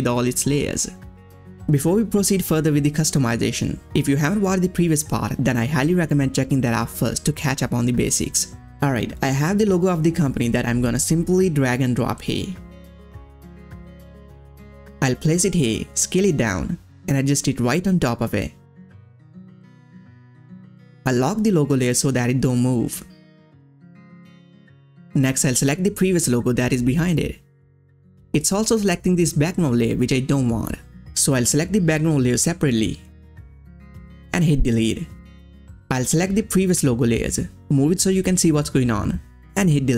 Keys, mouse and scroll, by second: 3.9 ctrl+scroll up 1, 3.9-5.1 scroll down 1, 5.2-8.6 ctrl+scroll down 1, 9.6 ctrl+scroll down 1, 9.6-14.0 drag, 14.0 click, 14.0-16.6 drag, 16.6 ctrl+scroll up 1, 17.5 click, 18.6 ctrl+scroll down 1, 20.2 ctrl+scroll down 1, 21.5 click, 24.2 ctrl+scroll down 1, 25.7 click, 27.0 scroll up 1, 30.7 scroll up 1, 30.7 click, 31.2-32.8 scroll down 1, 32.8 click, 35.5 click, 35.5-39.9 drag.